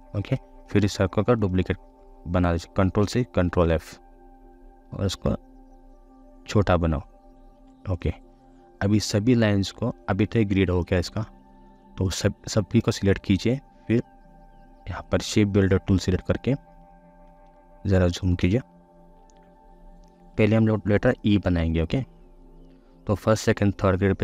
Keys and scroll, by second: 2.9 ctrl+c, 3.4 ctrl+f.